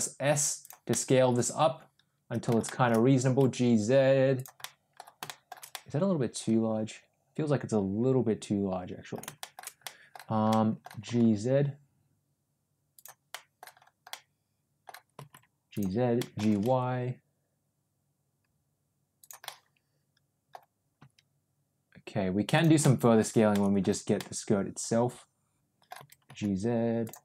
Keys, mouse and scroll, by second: 0.8-2.4 middle drag, 2.6 shift+middle click, 3.2 g, 4.5-4.9 middle drag, 5.2 middle drag, 5.6-9.0 middle drag, 9.3 shift+middle click, 9.7 middle click, 10.4 middle click, 10.9 g, 13.2 middle click, 14.0 middle click, 15.0 g, 16.1-19.2 middle drag, 16.3 g, 19.3-20.5 middle drag, 20.9 s, 22.7 middle click, 23.5 middle click, 24.1-25.8 middle drag, 25.9 g.